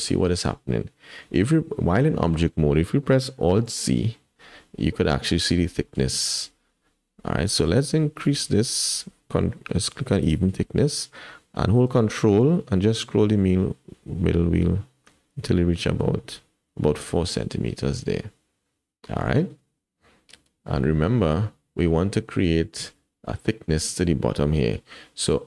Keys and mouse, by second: 3.6 alt+z, 10.2 click.